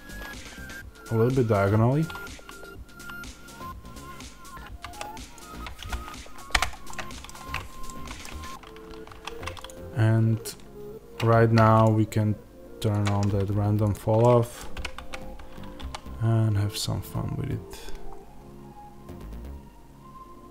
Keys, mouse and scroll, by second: 6.5 Return, 6.5 right click, 7.1 click, 7.3-7.8 scroll up 2, 8.1-9.0 scroll down 2, 9.0 1, 9.5 click, 14.1-20.5 middle drag, 14.6 g.